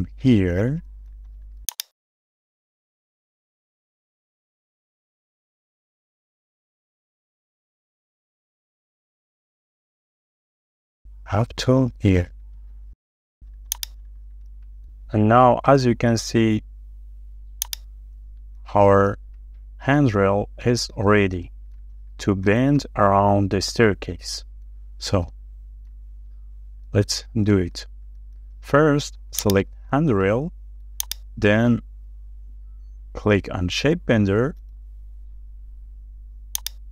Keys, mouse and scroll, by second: 0.3-0.6 scroll up 1, 2.2-2.6 scroll down 1, 2.9 shift+middle click, 3.0-3.8 shift+scroll down 3, 6.7-7.9 scroll up 1, 9.0 middle click, 10.0 shift+middle click, 11.4 Left, 11.8 Right, 14.2-14.5 scroll down 1, 14.8 scroll down 1, 14.9 shift+middle click, 17.2-17.7 scroll up 1, 18.1 middle click, 20.5-20.8 scroll down 1, 21.1 shift+middle click, 22.2 scroll down 1, 22.6 shift+middle click, 23.1-23.4 scroll up 1, 23.4-24.4 shift+scroll down 3, 24.5 shift+middle click, 26.3 middle click, 27.3 shift+middle click, 28.1-28.4 scroll up 1, 28.8 middle click, 29.7-30.0 scroll up 1, 30.1 middle click, 30.3 scroll down 1, 31.9 shift+middle click.